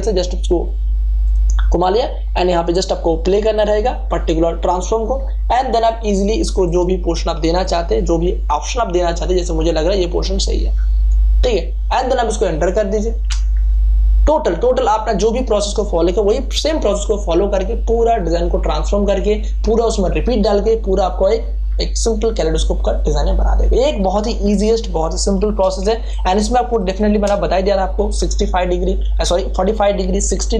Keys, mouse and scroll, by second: 0.1 click, 3.5 click, 6.6 right click, 6.7 right click, 7.6-13.2 drag, 13.2 Return, 25.3 ctrl+d, 25.7 space, 26.1 ctrl+click.